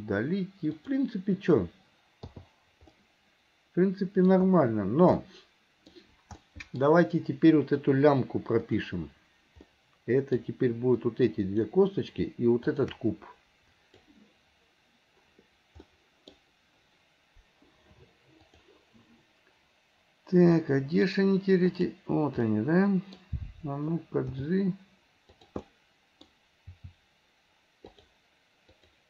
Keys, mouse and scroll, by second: 0.9 click, 3.0-6.9 middle drag, 8.8 click, 9.8-11.1 middle drag, 11.1 click, 13.9 click, 16.0-18.6 middle drag, 18.6 click, 20.6-24.4 middle drag, 24.4 g, 25.8-28.7 middle drag, 28.7 click.